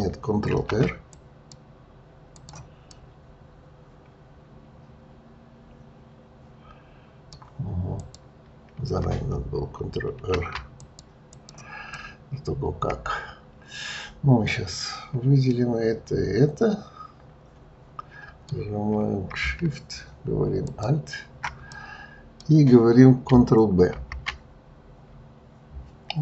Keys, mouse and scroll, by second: 0.4 ctrl+r, 2.9-6.0 middle drag, 7.9 click, 10.1 ctrl+r, 12.0-15.0 middle drag, 20.6 alt+shift+click, 21.7-23.9 middle drag, 23.9 ctrl+b.